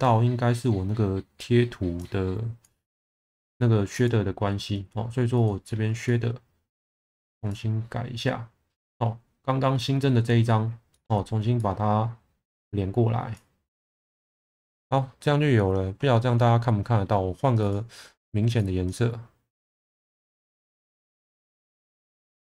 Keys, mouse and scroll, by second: 2.0 click, 3.9-5.4 drag, 6.2 middle click, 7.5-8.9 drag, 11.8-13.0 drag, 13.3-14.0 drag, 20.5 click, 22.0 shift+middle click.